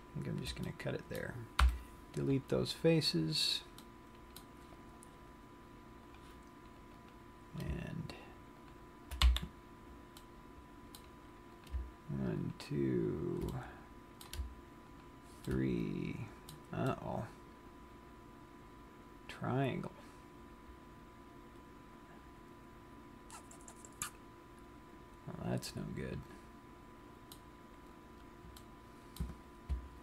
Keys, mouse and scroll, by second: 0.2 shift+click, 1.0 middle click, 1.9 Delete, 3.8 middle click, 6.4 click, 7.2 click, 9.0 shift+click, 9.5 f, 10.4 middle click, 12.0 click, 12.7 shift+click, 13.6 middle click, 15.1 shift+click, 15.8 shift+middle click, 17.1 middle click, 28.3-29.0 scroll up 2, 29.0 middle click.